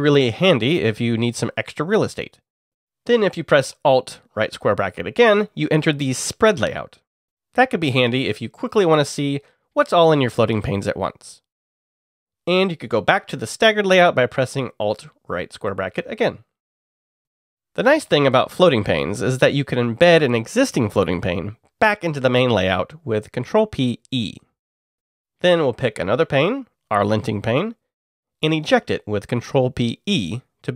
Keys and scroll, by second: 0.0 alt+Down, 3.5 alt+], 6.0 alt+], 12.2 alt+], 15.1-16.9 typing, 18.2-20.9 typing, 21.1 Return, 23.1 ctrl+p, 25.0 e, 27.3 alt+Up, 28.3 alt+Up, 29.9 ctrl+p.